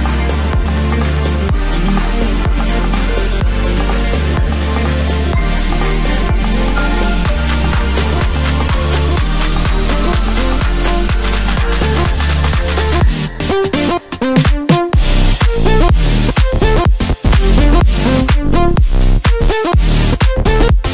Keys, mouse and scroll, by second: 0.9-1.8 ctrl+KP_8, 3.9 click, 4.9 e, 5.7 s, 7.4 e, 10.5 click, 12.0 alt+m, 13.7-15.3 middle drag, 15.3-15.9 scroll up 1, 15.9-16.5 scroll up 1, 17.0 ctrl+r, 20.0 KP_1.